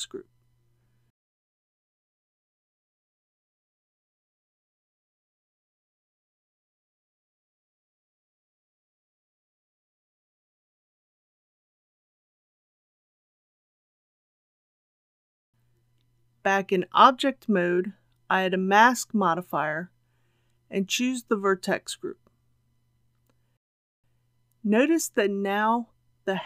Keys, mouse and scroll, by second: 0.6-3.2 drag, 9.6-10.1 typing, 10.4 Return, 12.4 click, 15.9 Tab, 17.6-26.4 drag.